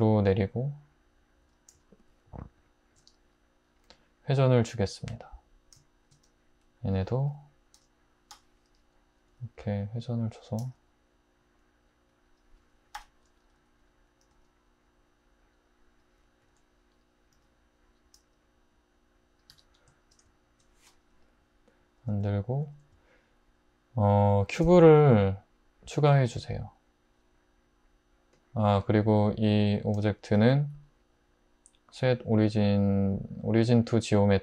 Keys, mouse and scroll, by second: 3.7 r, 7.8 l, 8.4 l, 9.3 r, 10.6 g, 13.0 l, 13.6 r, 14.3 g, 16.5 l, 17.3 r, 18.2 g, 19.5 Tab, 24.5 shift+a.